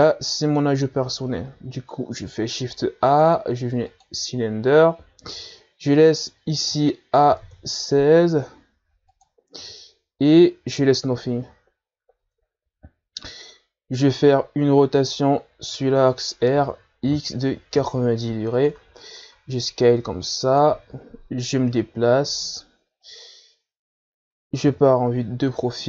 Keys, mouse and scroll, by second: 1.1-1.5 scroll down 1, 1.5-2.8 middle drag, 2.8 shift+a, 7.8-10.5 drag, 13.1-13.5 scroll up 2, 13.5 Tab, 17.8 r, 20.6 s, 22.7-25.7 drag.